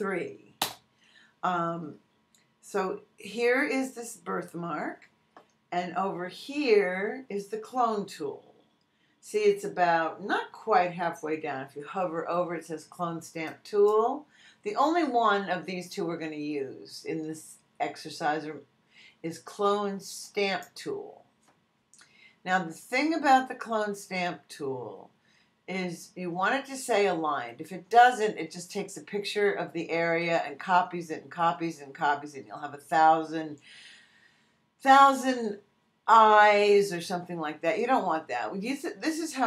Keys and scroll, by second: 0.6 Return.